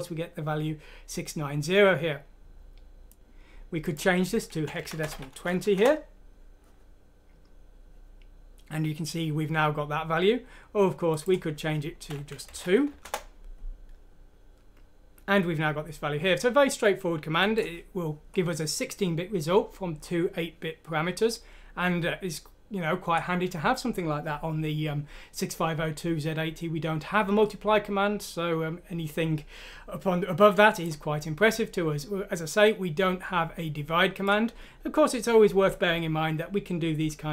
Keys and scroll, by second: 3.1 ctrl+z, 5.7 F6, 5.8 Return, 12.5 Delete, 12.9 F6, 13.0 Return.